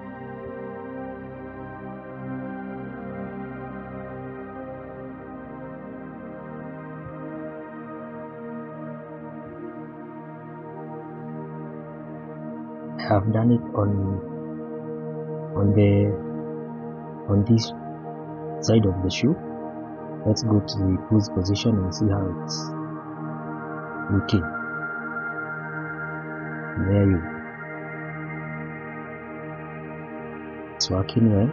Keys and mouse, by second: 0.0 click, 0.6 click, 1.5 click, 2.5-5.8 drag, 7.5-9.0 drag, 11.2 middle click, 11.9-12.3 shift+middle drag, 14.3-15.2 middle drag, 18.6 click, 19.8 click, 20.8 shift+middle click, 24.3 click, 25.5-26.0 middle drag, 26.7-27.0 middle drag, 27.2-27.5 shift+middle drag, 27.6-28.6 middle drag, 30.2-30.7 middle drag, 31.3 shift+middle drag.